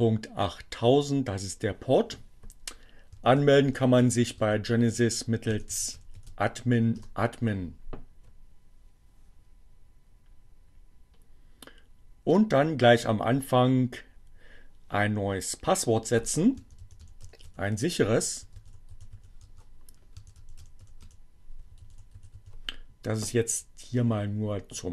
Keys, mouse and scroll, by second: 1.2-2.0 typing, 3.4-6.8 typing, 11.9 click, 16.3-22.4 typing.